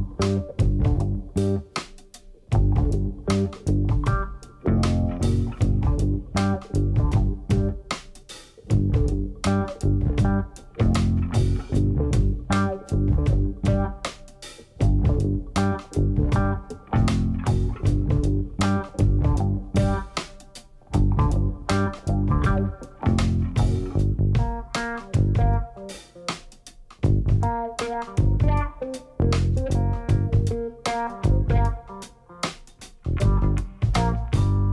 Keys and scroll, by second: 6.3 1, 6.8 shift+z, 9.5 shift+z, 12.6 1, 13.9 shift+z, 21.9 g, 22.6 z, 29.3 shift+z.